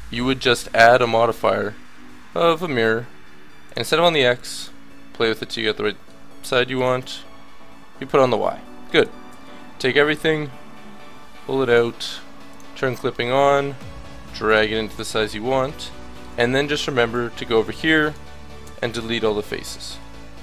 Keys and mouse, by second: 2.8 middle click, 5.4 middle click, 6.7-8.7 middle drag, 9.3 a, 10.1-15.1 drag, 15.1 middle click, 16.3 a, 16.9 b, 18.6 x.